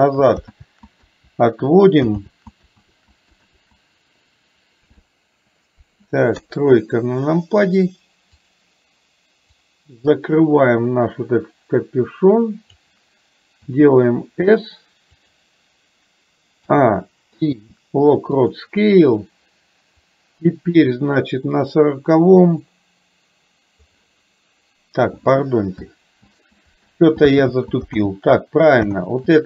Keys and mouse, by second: 0.7 ctrl+z, 2.2 ctrl+z, 2.9 ctrl+z, 6.4 KP_3, 8.4 click, 9.5-12.9 drag, 16.7 a, 20.0-23.9 drag, 26.3 ctrl+z, 27.0 ctrl+z, 27.5 ctrl+z, 28.2 ctrl+z, 29.2 ctrl+z.